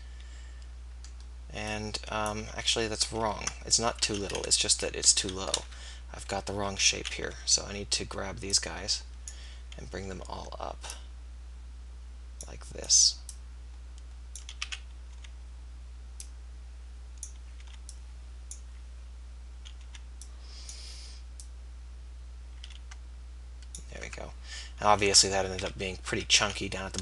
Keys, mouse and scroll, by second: 0.2 click, 2.5 ctrl+z, 2.7 ctrl+z, 3.2 ctrl+z, 4.0 f, 5.2-7.4 typing, 12.1-14.6 drag, 14.6 a, 15.2 b, 17.9 b, 19.9 b, 21.4-23.3 drag, 24.4 Tab, 25.1 Tab, 25.6 z, 26.1 z, 26.5 a.